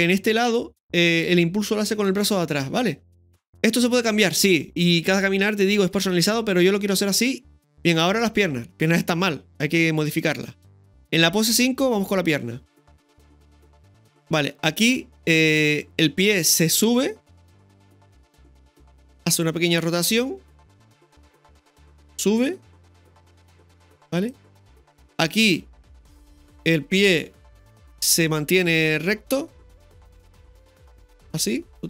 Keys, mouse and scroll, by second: 10.3 space, 11.0-11.8 drag, 13.5 ctrl+KP_1, 13.5 scroll up 1, 13.5 KP_3, 13.7 shift+middle click, 15.4 right click, 16.6-20.0 drag, 18.8-19.5 typing, 20.0 right click, 22.4-24.3 drag, 25.3 right click, 28.5 right click, 28.5 r.